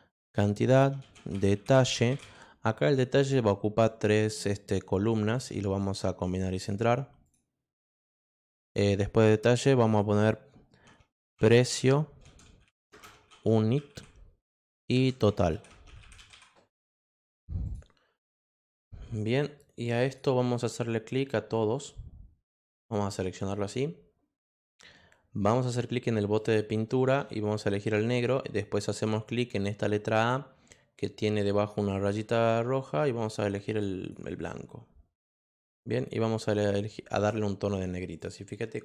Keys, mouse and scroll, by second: 0.7-2.7 typing, 3.2 click, 3.8-4.9 drag, 6.5 click, 7.2 click, 7.8 click, 11.3-16.8 typing, 17.6 click, 19.8 click, 21.5-22.9 drag, 26.4 click, 27.9 click, 31.9 click, 33.8 click, 37.1 click, 38.2 click.